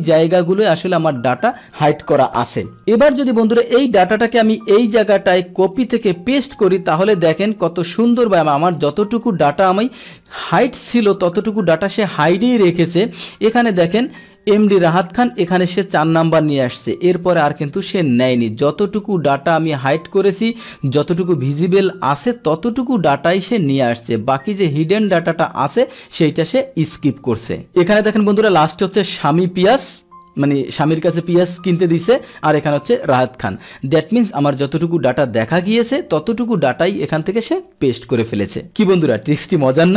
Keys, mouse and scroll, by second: 3.8 click, 5.0 click, 6.3 ctrl+v, 7.5 click, 8.6 click, 8.8 click, 10.3-13.4 drag, 14.7 click, 15.8 click, 17.2-17.8 drag, 18.3 click, 19.3-20.6 drag, 22.2-23.3 drag, 24.1-25.1 drag, 29.7 click, 31.5 click, 32.7 click, 34.2 click, 36.0-36.6 drag, 37.2 click.